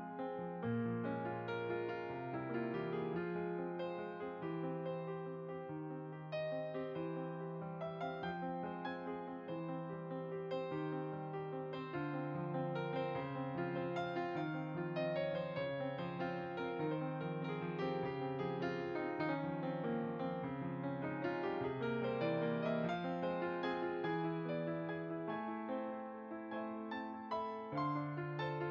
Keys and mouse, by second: 0.9 click, 1.0 shift+click, 4.8 click, 7.9 f, 8.5 click, 9.0 f, 9.5 click, 9.9 f, 10.1 click, 15.2 middle click, 18.3 click, 21.2 m, 22.0 f, 22.3 click, 22.8 e, 22.8 click, 25.7-28.4 middle drag, 25.7 typing.